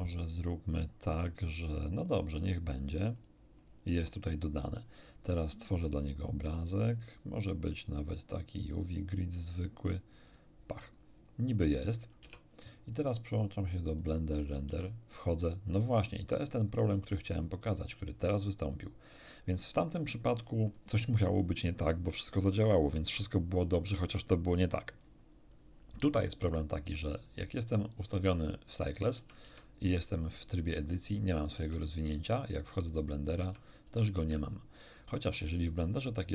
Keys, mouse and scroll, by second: 2.0 click, 3.1 click, 5.8 click, 7.8 click, 8.6 click, 10.2 click, 11.1 scroll down 1, 12.2 Tab, 13.2 click, 13.8 click, 14.6 Tab, 27.2 click, 28.2 click, 29.1 Tab, 29.4 Tab, 31.5 Tab, 32.4 click, 33.0 click, 33.4 Tab, 33.8 Tab, 34.1 Tab.